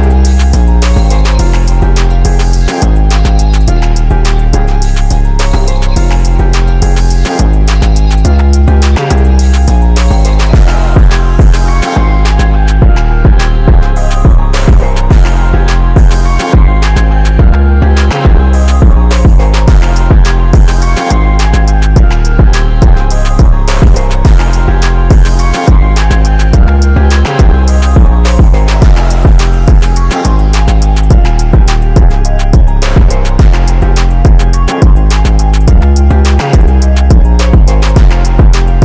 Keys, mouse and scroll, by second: 1.9-5.0 drag, 10.3 typing, 10.7 click, 12.1 typing, 12.4 click, 13.6 alt+click, 14.4-15.2 alt+scroll up 2, 15.3 click, 16.6 click, 16.9 alt+scroll down 1, 17.4 click, 18.4 click, 20.1 ctrl+t, 20.4 click, 21.1 click, 22.1-25.2 drag, 27.7 click, 33.1 click, 35.6 click, 37.0 click, 38.1 click.